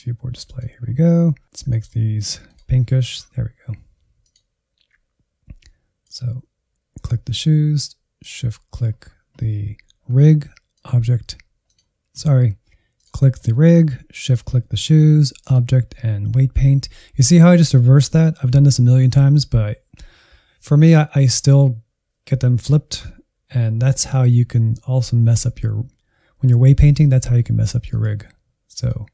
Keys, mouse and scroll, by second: 0.1-0.8 scroll down 11, 0.8-2.9 drag, 2.9 scroll up 1, 4.1-24.2 drag, 27.8-29.1 drag.